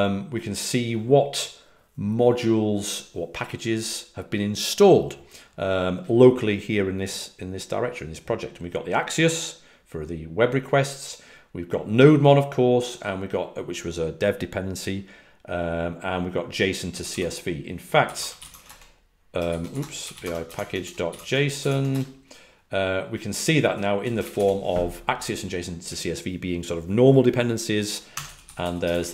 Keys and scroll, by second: 17.0-21.5 typing, 21.6 Tab, 21.8 Return, 23.3-24.1 typing, 28.2-28.6 typing.